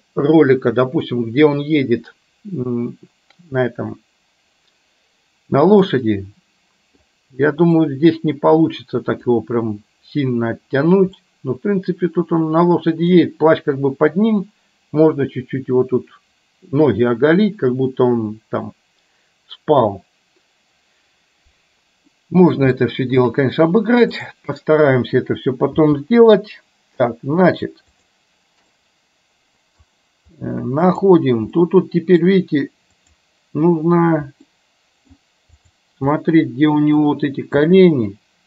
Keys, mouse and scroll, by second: 6.0-7.1 middle drag, 7.9 scroll up 1, 8.0-9.4 middle drag, 11.2-13.2 middle drag, 22.1-22.7 middle drag, 22.9-23.4 shift+middle drag, 24.4 click, 25.9 g, 28.7-29.9 middle drag, 31.0 click, 31.6-32.2 middle drag, 34.6-35.2 middle drag, 35.6 click, 36.2-37.1 middle drag, 37.6 g.